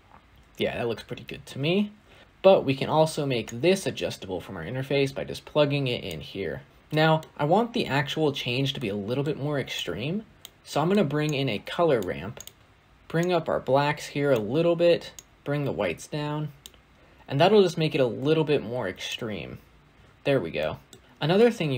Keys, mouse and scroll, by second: 1.3 space, 6.0 click, 6.7-9.1 middle drag, 9.1-9.6 scroll up 6, 9.6 click, 10.5-11.1 middle drag, 11.1 click, 11.9 g, 12.6-13.1 scroll up 9, 13.1-18.1 drag, 19.0 click, 19.9-20.4 scroll down 8, 20.4 middle click, 21.0 click, 21.0 scroll down 2, 21.3 middle click.